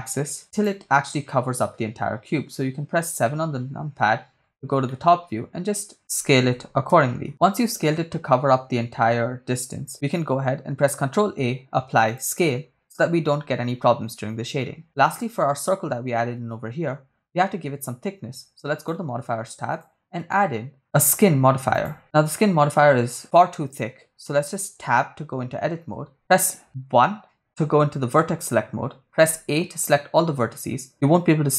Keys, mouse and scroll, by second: 0.6 click, 2.0 KP_0, 2.6 KP_7, 3.4-4.7 scroll down 7, 4.9-6.1 shift+middle drag, 6.5 s, 6.9 y, 7.3 ctrl+click, 7.3 scroll down 1, 7.6-8.1 scroll up 2, 9.0 KP_0, 10.9 ctrl+a, 14.9-15.9 right drag, 18.8 click, 19.7-21.9 drag, 24.7 Tab, 26.9 1, 27.4 1, 29.5 a.